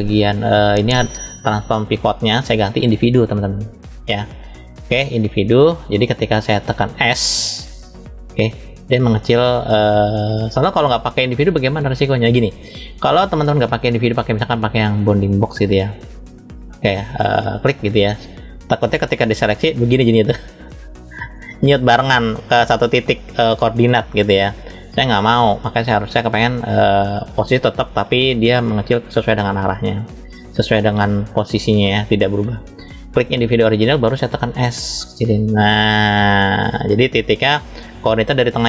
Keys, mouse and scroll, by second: 11.8-13.4 right drag, 13.4-17.4 drag, 24.3-26.4 right drag, 26.4-33.5 drag, 37.5 click.